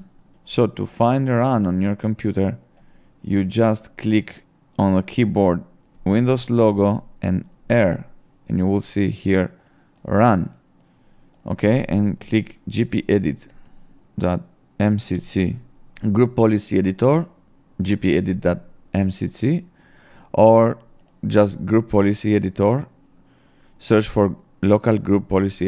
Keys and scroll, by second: 0.0-0.3 typing, 7.7 r, 12.7 g, 13.5 p, 14.0 ., 15.2 m, 15.6 s.